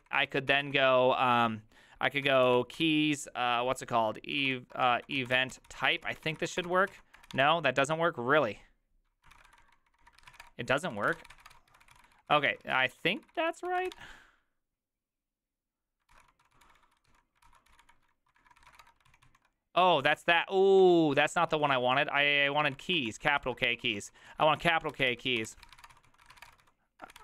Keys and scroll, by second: 0.0-1.0 typing, 2.3-2.8 typing, 4.4-7.8 typing, 4.7 Return, 9.2-14.3 typing, 16.1 ctrl+c, 16.1-20.8 typing, 18.4 ctrl+^, 21.2 ctrl+u, 21.5 ctrl+u, 23.0 ctrl+d, 23.4 ctrl+u, 23.5-27.2 typing.